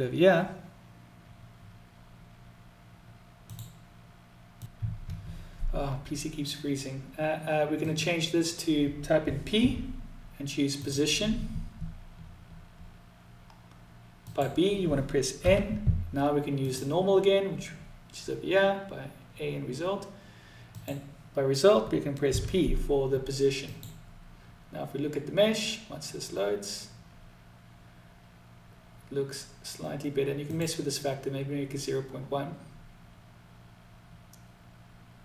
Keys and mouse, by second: 7.1-12.7 drag, 13.5-18.4 drag, 20.2-25.5 drag, 29.8-33.9 drag.